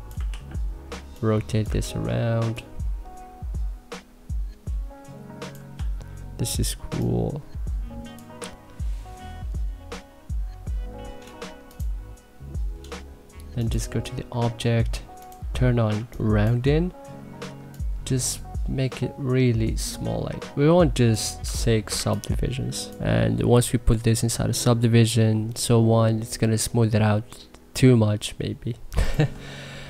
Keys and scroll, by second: 0.1 ctrl+z, 1.6 ctrl+z, 5.6 e, 15.7 2, 21.3 2, 21.7 1.